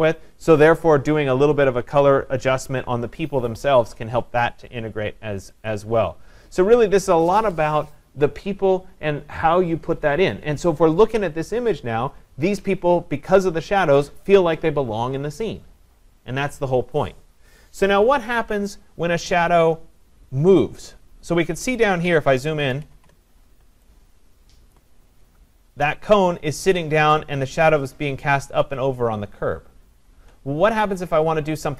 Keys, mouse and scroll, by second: 5.7 click, 22.1 click, 22.5 ctrl+=, 22.7 ctrl+=, 22.9 ctrl+=, 24.1-24.7 scroll, 24.7 click.